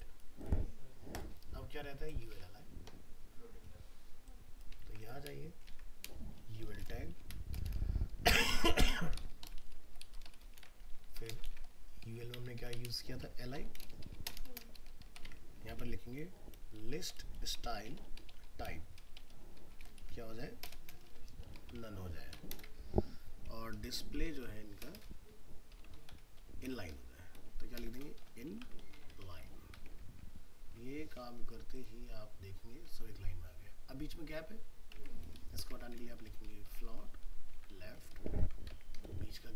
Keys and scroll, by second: 2.3 alt+Tab, 4.8 ctrl+c, 5.7 ctrl+v, 10.6 ctrl+c, 11.4 ctrl+v, 30.4 ctrl+s, 35.0 alt+Tab, 38.4 ctrl+s, 38.7 alt+Tab.